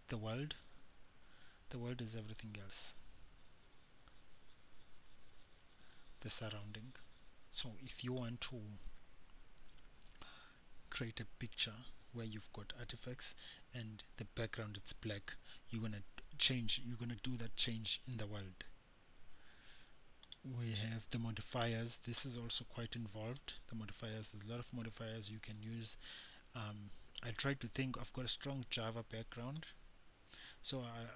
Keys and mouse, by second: 2.3-20.5 middle drag, 25.5-31.1 middle drag.